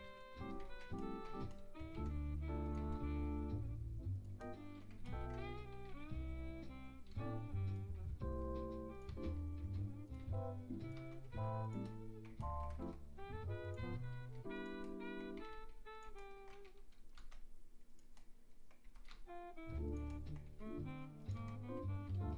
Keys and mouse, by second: 0.6 ctrl+z, 1.6 click, 1.9 s, 2.8 e, 5.8 g, 8.0 e, 9.1 s, 10.2 e, 11.0 s, 12.3 click, 12.8 e, 13.8 s, 14.3 click, 15.4 g, 16.7 e, 17.2 s, 18.9 e, 19.1 s, 20.5 e, 21.4 s.